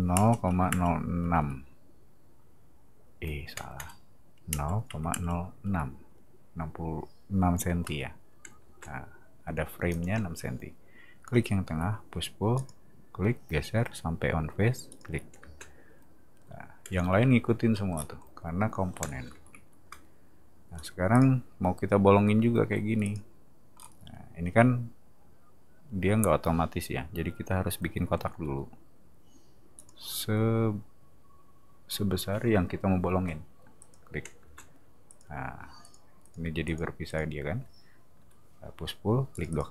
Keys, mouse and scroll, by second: 3.5 BackSpace, 3.8 BackSpace, 8.6 space, 9.9 click, 11.7 p, 12.5 click, 14.9 click, 15.4 space, 17.9 scroll down 2, 19.0 space, 20.6 scroll down 2, 21.1 click, 23.0 click, 23.7-26.1 middle drag, 28.3 r, 29.7 click, 33.8 click, 34.4 space, 35.1 click, 35.8 click, 36.2 click, 36.6 click, 37.0 click, 38.2 p, 39.3 click, 39.5 click.